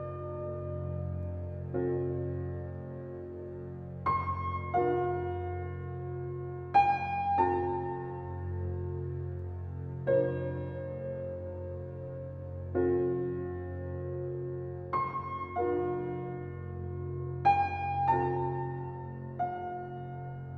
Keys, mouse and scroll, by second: 0.0 click, 0.7-3.6 middle drag, 3.6-4.2 scroll up 1, 4.2 click, 5.4 g, 13.9 alt+middle click, 15.3 alt+middle drag, 15.9 alt+middle drag.